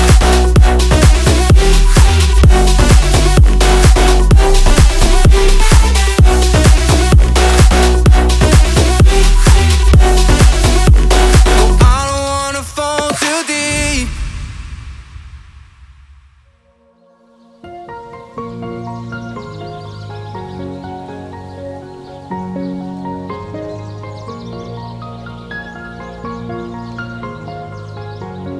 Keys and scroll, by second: 14.0 1, 17.8 ctrl+z.